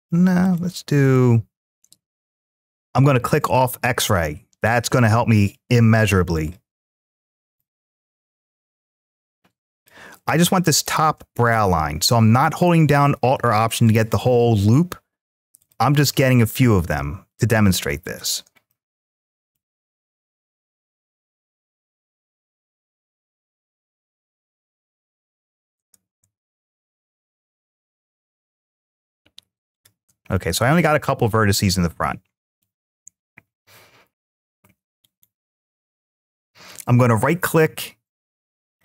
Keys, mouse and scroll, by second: 0.2 click, 0.9 middle click, 1.7-3.1 scroll up 2, 3.1 click, 4.7 shift+middle click, 6.1 click, 7.2 alt+click, 9.5 click, 10.5 click, 13.6 shift+click, 14.4 shift+click, 15.4 shift+click, 16.0 middle click, 17.8 shift+click, 18.5 middle click, 20.5 shift+click, 22.5 alt+shift+click, 26.2 ctrl+z, 26.8 shift+click, 27.6 shift+click, 28.6 shift+click, 29.5 shift+click, 30.1-32.4 middle drag, 34.8-38.8 right drag.